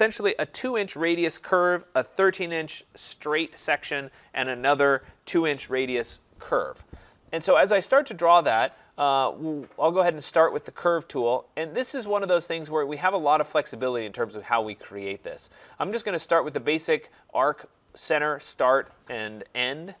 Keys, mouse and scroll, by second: 10.6-15.8 drag.